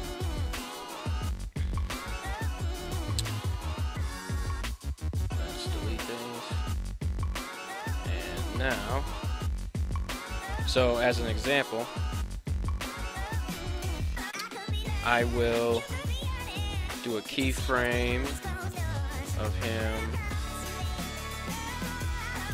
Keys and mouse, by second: 6.9-9.6 drag, 6.9 x, 11.2 a, 12.1 alt+g, 12.3 alt+r, 12.5 alt+s, 15.9 KP_1, 18.8 right click, 19.6 g, 20.5 click, 21.3 r, 21.5 click, 21.8 g, 22.4 click.